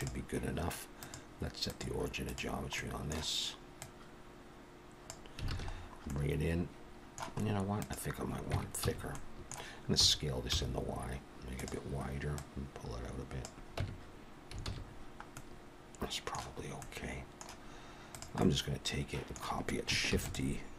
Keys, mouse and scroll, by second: 0.0 click, 0.0-0.8 scroll down 2, 1.0 click, 2.8 middle click, 3.8 click, 5.5 alt+a, 5.7 scroll down 4, 6.1 middle click, 7.4-8.5 scroll up 2, 7.8 click, 8.6 Tab, 8.8 a, 9.1 middle click, 10.0 s, 12.4 click, 13.8 Tab, 14.7 alt+a, 14.8-15.4 scroll down 1, 15.4 middle click, 15.4 scroll down 4, 16.6-17.6 scroll up 3, 16.8 middle click, 18.1 click, 18.4 middle click, 20.1 shift+d.